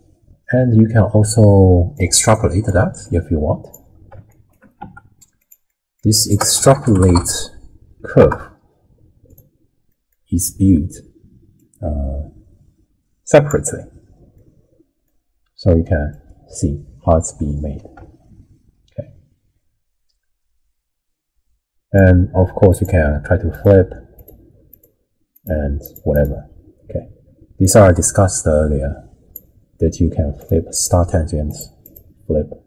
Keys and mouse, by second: 2.3 middle click, 3.1 click, 4.5 shift+click, 4.8 g, 5.7 middle click, 5.8 click, 6.3 ctrl+a, 9.9 middle click, 11.6-13.5 drag, 14.4-15.1 middle drag, 16.1-21.9 drag, 22.7 click, 23.5 click, 24.2 click, 24.7 click, 25.4 click, 25.8 click, 26.1 click, 27.6-29.3 drag, 30.4 click, 31.5 click, 31.8 click.